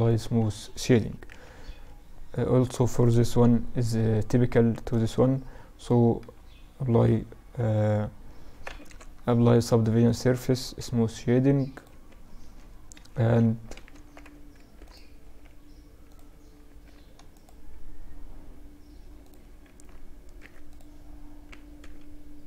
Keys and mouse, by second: 0.5 KP_Divide, 2.2-5.5 right drag, 5.5 ctrl+3, 6.8 t, 8.2 ctrl+Up, 9.3-13.2 drag, 10.1 t, 11.1 t, 12.2 KP_Decimal, 13.2 Tab, 13.8 ctrl+r, 16.0 ctrl+r, 18.9 ctrl+r.